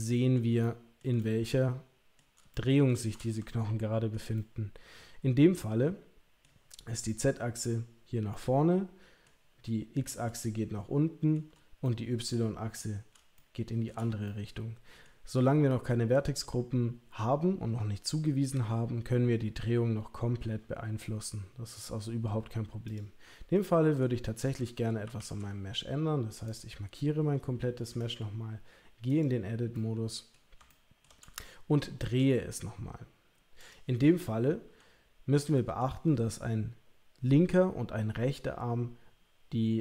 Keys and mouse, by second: 0.6-1.0 shift+middle drag, 1.2-2.1 middle drag, 2.5-2.8 shift+middle drag, 3.5-4.1 ctrl+middle drag, 4.3-6.4 middle drag, 8.3-9.2 middle drag, 10.3-11.3 shift+middle drag, 11.8-12.3 middle drag, 13.3-13.8 shift+middle drag, 14.2 middle click, 22.9 click, 23.5-24.0 middle drag, 25.0 KP_3, 25.1 KP_1, 26.4 click, 28.0-29.2 drag, 29.7 middle click, 30.7 ctrl+middle click, 31.4 shift+middle click, 34.2-35.8 middle drag.